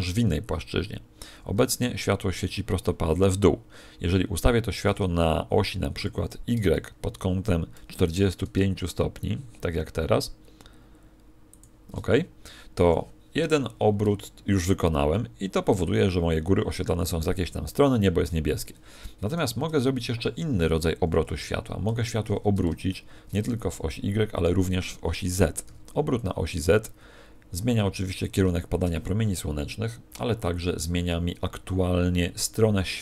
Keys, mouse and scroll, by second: 1.5 alt+r, 11.6 ctrl+shift+click, 18.3 Escape, 19.4 KP_1, 21.2 KP_7, 21.8 z, 22.8 shift+middle click, 28.2 ctrl+click.